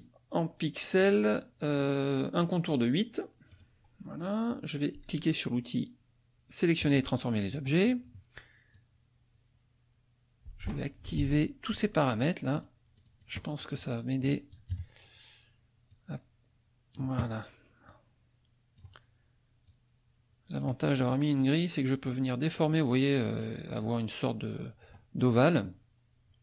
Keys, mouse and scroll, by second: 0.9 click, 2.4 right click, 3.5 click, 6.8 click, 7.5 middle click, 8.7-10.8 drag, 11.2 ctrl+z, 11.6 ctrl+click, 12.1 ctrl+click, 12.5 ctrl+click, 13.0 ctrl+click, 14.7 KP_Subtract, 15.9-17.2 drag, 17.9 click, 19.7 click, 21.6 click, 24.8 middle click.